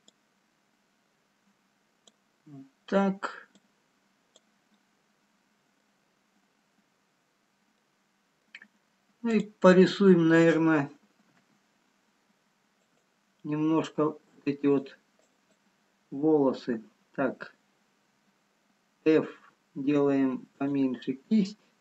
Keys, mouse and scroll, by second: 0.1 click, 3.6 click, 5.4 middle click, 6.5-6.9 scroll down 1, 7.0-7.6 scroll up 2, 10.1 middle click, 10.1 click, 10.1 scroll down 3, 11.8 f, 13.6 scroll up 1, 14.6 click, 15.3 click.